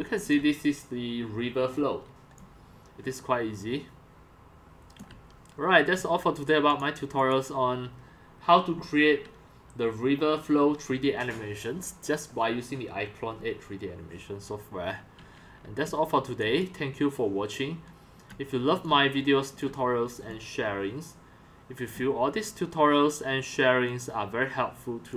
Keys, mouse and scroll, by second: 0.1 c, 0.4-1.7 drag, 1.7 scroll down 1, 1.7-2.2 scroll down 1, 2.2 scroll down 1, 2.3 scroll down 1, 2.4 x, 3.0 x, 3.3-5.0 c, 5.4 c, 6.8 click, 15.9-22.2 typing, 16.7 drag, 18.5-18.9 drag, 19.9 click, 24.1 click.